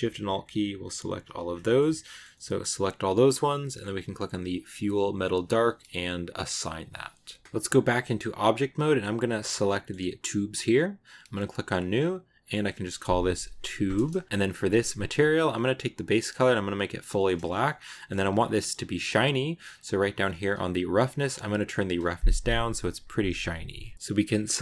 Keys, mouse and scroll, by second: 1.0 alt+shift+right click, 1.3 scroll down 1, 1.5 middle click, 2.1 scroll up 1, 2.2-3.9 middle drag, 3.9 click, 6.3-7.4 drag, 7.4 middle click, 7.7 Tab, 9.3 right click, 9.5-11.3 middle drag, 11.3-14.2 drag, 14.2-15.4 middle drag, 15.4 click, 17.0-17.7 scroll up 2, 17.0 middle click, 17.7-19.1 middle drag, 19.1-21.2 scroll down 11, 21.3-23.9 drag, 23.9 middle click, 24.1 right click.